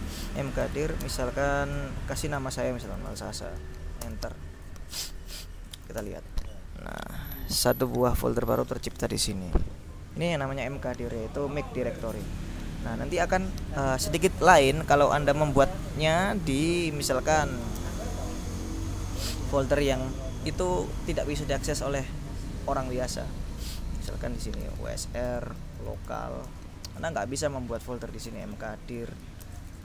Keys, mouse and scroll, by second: 0.1-1.4 typing, 2.5-3.8 typing, 4.1 Return, 5.6-6.5 typing, 8.0 click, 17.3-19.0 typing, 24.5-26.6 typing, 26.7 Return, 28.2-29.8 typing.